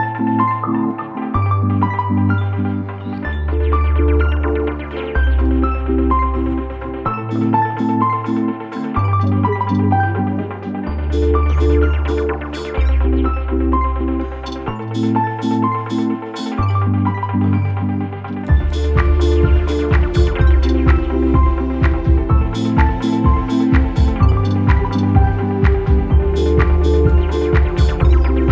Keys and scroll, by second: 1.9 space, 7.1 space, 7.7 space, 8.7 space, 9.5 space, 12.4 space, 18.5 ctrl+-, 18.8 space, 26.2 ctrl+z.